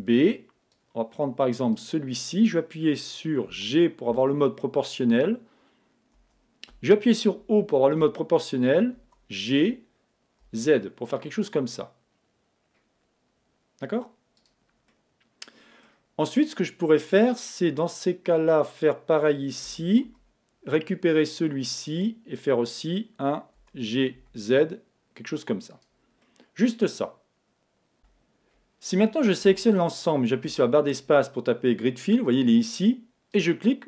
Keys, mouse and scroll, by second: 3.5 g, 7.4 o, 9.0 g, 14.5-16.1 drag, 14.9-16.6 middle drag, 19.7 a, 20.1 b, 23.6 g, 25.9-27.5 drag, 26.3-27.9 middle drag, 28.0 a, 29.5 a, 30.5 space.